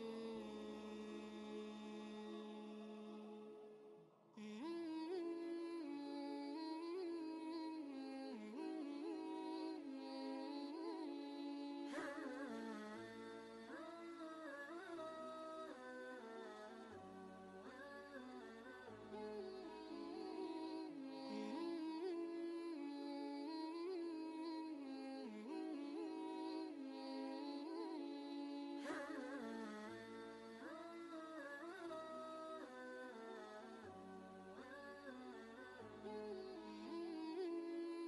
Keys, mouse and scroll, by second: 0.3 shift+click, 3.9 shift+click, 9.0 typing, 9.1 ctrl+space, 9.3 ctrl+click, 9.6 ctrl+space, 10.4 click, 10.9 ctrl+space, 11.1 ctrl+click, 12.3 click, 12.5 space, 16.3 space, 16.3 click, 20.8 click, 20.8 click, 23.0 ctrl+space, 23.2-24.7 ctrl+drag, 24.7-27.1 drag, 27.1-30.0 alt+drag, 30.0 ctrl+z, 31.3 typing, 31.4 ctrl+space, 31.6 ctrl+click, 31.9 ctrl+space, 33.0 click, 33.5 ctrl+space, 35.1 ctrl+space, 35.4 click, 35.8 ctrl+space, 36.0 ctrl+click, 36.4 ctrl+space, 36.7 click.